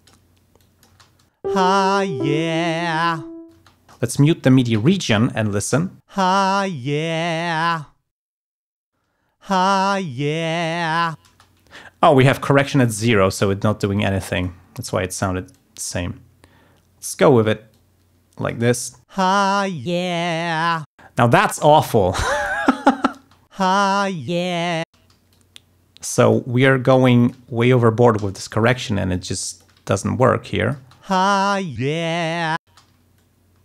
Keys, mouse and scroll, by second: 0.1 click, 0.6 click, 0.9 space, 3.6 space, 3.9 ctrl+click, 4.7 alt+1, 6.0 space, 8.2 space, 8.7 alt+1, 9.0 space, 11.2 space, 12.7 d, 12.9 click, 13.9 click, 15.5-17.3 drag, 17.7 click, 18.6 space, 20.9 space, 22.5 ctrl+click, 23.1 space, 23.8 ctrl+scroll up 2, 24.9 space, 25.3-26.5 drag, 26.8 alt+click, 28.1 e, 28.3 click, 29.1 alt+click, 30.1 alt+click, 30.7 space, 32.6 space, 33.1 alt+click.